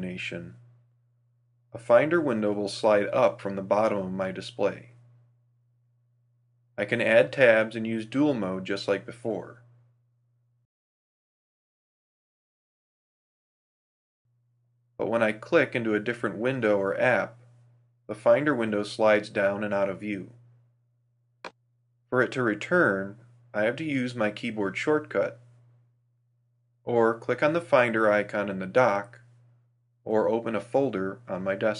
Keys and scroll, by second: 8.6 super+u, 17.3 super+u, 27.1 alt+super+v.